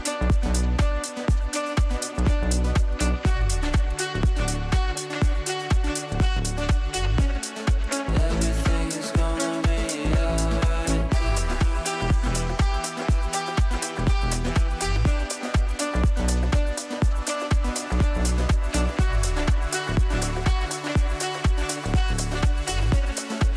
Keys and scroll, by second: 19.0 Delete.